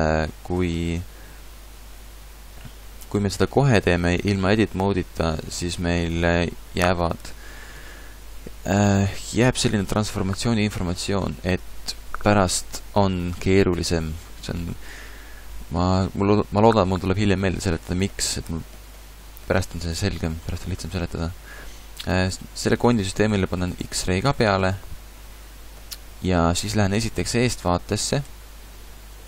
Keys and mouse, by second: 26.9 KP_1, 27.3 KP_5, 28.2 KP_5.